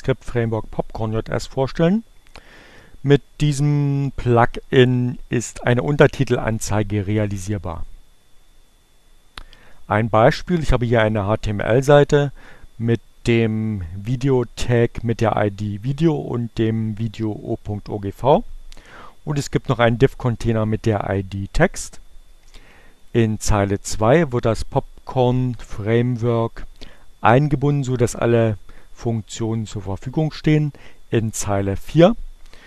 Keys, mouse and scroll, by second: 22.6 click, 31.3 click.